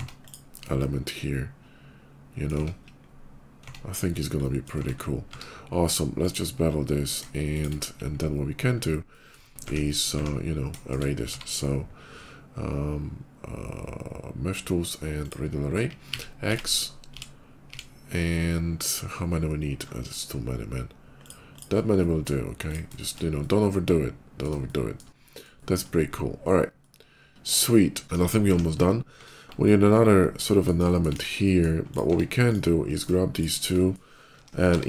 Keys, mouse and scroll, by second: 0.1 click, 0.4-2.3 middle drag, 3.0 Tab, 3.0 /, 3.4 Tab, 4.2 middle click, 4.8 middle click, 4.9 middle click, 4.9 q, 5.3 Tab, 6.0 click, 7.4 shift+click, 7.5 shift+middle click, 7.9 /, 8.4 middle click, 8.5 middle click, 8.7 middle click, 10.8 shift+middle click, 10.9 q, 15.0 ctrl+click, 15.8 x, 16.5 x, 18.0 middle click, 18.6 scroll up 2, 19.7-20.2 scroll down 3, 21.1 click, 21.4 click, 21.8 middle click, 22.3 click, 22.8 shift+middle click, 23.2-24.3 shift+middle drag, 24.4 shift+middle click, 26.6-28.0 shift+middle drag, 28.0 KP_5, 28.3 `, 28.9 q, 29.9 middle click, 30.2 middle click, 30.7 middle click, 31.0 KP_5, 31.3 middle click, 31.5 click, 31.9 Tab, 32.2 click, 32.6 middle click, 33.2 shift+click, 33.6 shift+middle click, 34.2 o, 34.5 i.